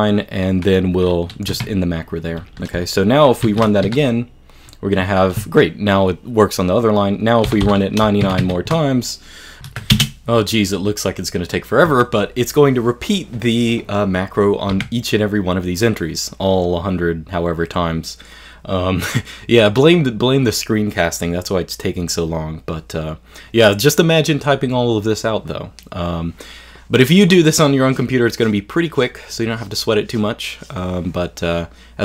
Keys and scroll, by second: 1.5 q, 3.5 shift+2, 3.9 g, 7.5 9, 7.6 9, 8.3 shift+2, 8.4 shift+2.